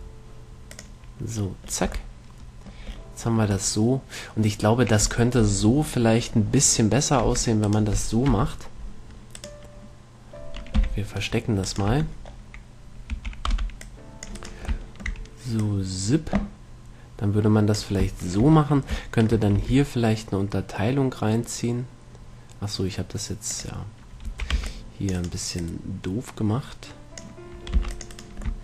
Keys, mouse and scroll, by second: 2.1 a, 2.8 click, 3.3 middle click, 7.5 Tab, 8.5 KP_1, 11.1 right click, 11.1 h, 11.9-13.9 right drag, 12.1 Tab, 13.4 a, 13.9 middle click, 13.9 c, 14.7-16.5 right drag, 15.1-16.9 middle drag, 15.9-17.7 drag, 18.5-21.4 middle drag, 19.8 e, 23.9-25.6 drag, 24.5 a, 24.9 c, 25.8-27.6 drag, 28.0 c.